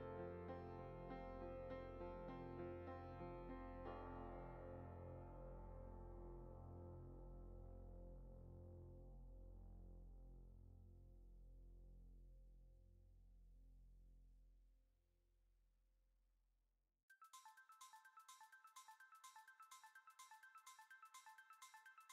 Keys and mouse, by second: 0.2 e, 2.2 e, 5.2 shift+middle drag, 5.6 middle click, 6.0 ctrl+r, 9.0 click, 9.5 click, 10.5-10.9 middle drag, 11.0 shift+middle drag, 11.6 e, 13.4 e, 18.5 click, 19.1 click, 19.4 alt+shift+click, 19.6 alt+shift+click, 20.2 g, 21.8-22.1 shift+middle drag.